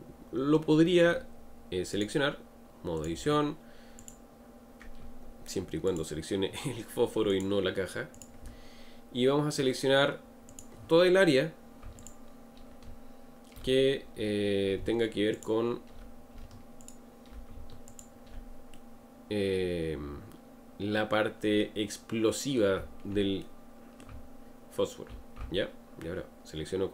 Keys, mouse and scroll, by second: 2.0-4.1 drag, 5.0 Tab, 5.9 click, 7.3-10.3 drag, 10.5 click, 12.0 alt+click, 14.0-15.4 scroll up 2, 15.4 alt+shift+click, 16.8 alt+shift+click, 17.9 alt+shift+click, 18.8-21.8 middle drag, 23.5-26.6 middle drag.